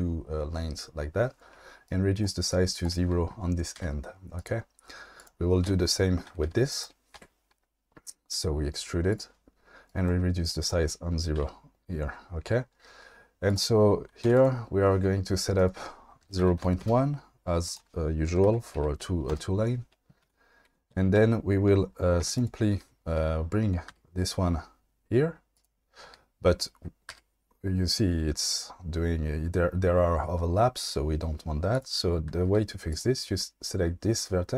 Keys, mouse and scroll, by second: 1.9 click, 2.6 click, 3.7 g, 4.4 click, 5.7-7.2 typing, 9.9 click, 10.5 click, 11.4 g, 13.5 click, 14.2 2, 14.3 click, 15.7-16.8 drag, 17.6-19.3 drag, 20.2 1, 20.3 2, 20.6 2, 21.2 1, 22.4 click, 23.9 g, 25.5 click, 27.1 g, 32.4 g.